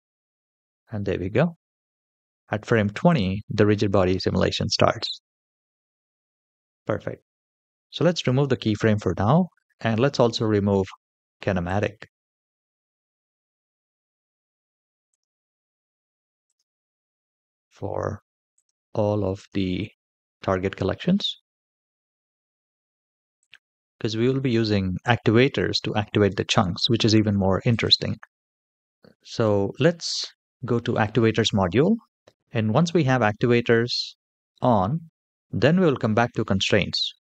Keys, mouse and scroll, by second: 1.9 space, 2.8 click, 7.9 click, 11.5 click, 14.9 click, 17.1 click, 18.4 click, 19.1 click, 21.9 click, 23.2 click, 27.5 click.